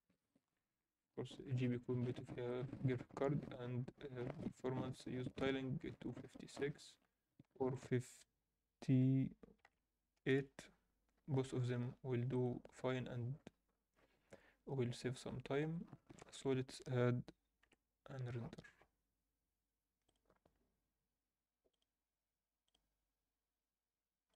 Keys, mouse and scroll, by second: 0.2-1.2 drag, 1.7 scroll down 1, 2.5-2.8 drag, 2.5-2.9 scroll down 2, 7.7-10.7 drag, 12.3-13.3 drag, 13.3 scroll down 1, 15.3-16.4 scroll down 1, 16.6 ctrl+s.